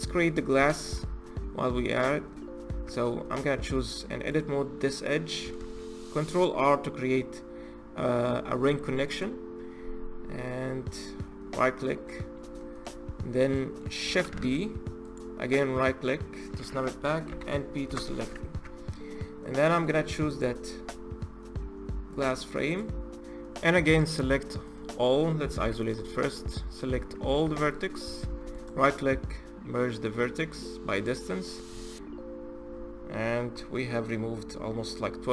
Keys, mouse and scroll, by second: 0.0-0.5 scroll down 2, 0.5-0.9 shift+middle drag, 0.9-1.4 scroll up 1, 1.4-2.6 middle drag, 2.6 Tab, 4.1 click, 5.4 ctrl+r, 11.3-11.9 scroll down 4, 11.9-12.9 middle drag, 12.9-13.4 scroll up 2, 13.4 middle click, 14.1 shift+d, 17.1 p, 18.3 Tab, 19.1-19.4 scroll down 1, 19.4 middle click, 20.1 click, 20.4-21.3 scroll up 2, 21.9 click, 22.5 click, 24.0 middle click, 24.6-25.4 scroll down 1, 25.4 KP_Divide, 26.1 middle click, 26.7 Tab, 27.2 1, 27.8 a, 28.3-31.5 right drag, 35.2 middle click.